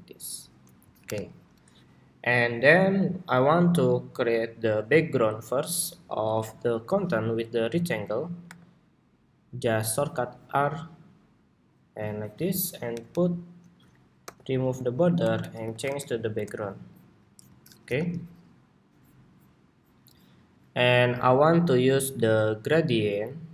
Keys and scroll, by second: 0.7 super+-, 1.3 super+-, 12.6 alt+super+Down, 14.5 super+g, 14.9 super+r, 17.5 super+=.